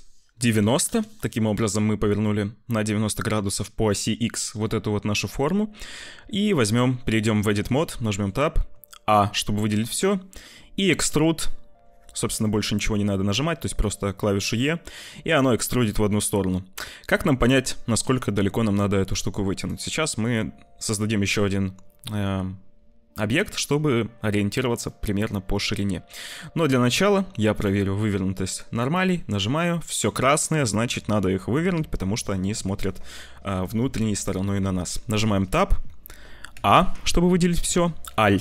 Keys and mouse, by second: 4.6 click, 5.8 click, 6.6 click, 7.2 Tab, 7.9 click, 8.4 a, 9.1 click, 10.5 e, 20.0 click, 24.9 click, 25.7 Tab, 27.6-29.5 drag, 29.7 middle click, 30.6 middle click, 34.9 Tab, 36.4 a.